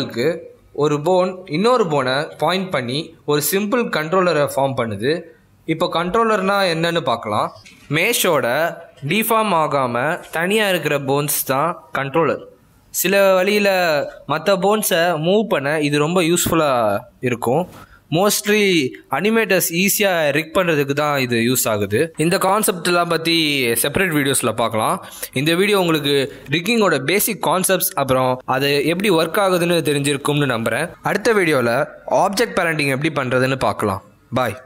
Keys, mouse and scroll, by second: 0.2 click, 1.0 click, 1.6 click, 1.7 g, 3.0 shift+middle click, 3.0 scroll down 2, 3.1 g, 16.4 z, 17.1 click, 19.2 r, 20.4 click, 20.8 click, 22.6 r, 23.1 g, 24.7 z, 25.2 g.